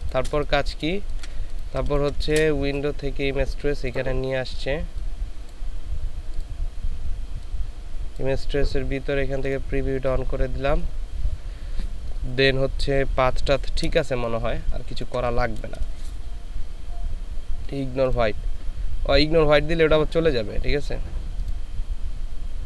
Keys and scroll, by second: 1.8 ctrl+space, 14.2 ctrl+space.